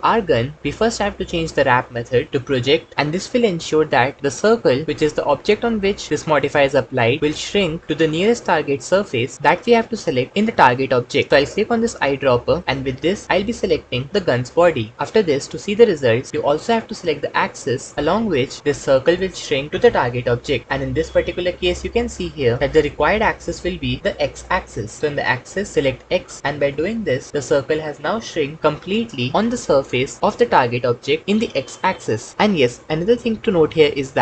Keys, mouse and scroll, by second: 1.8-2.7 drag.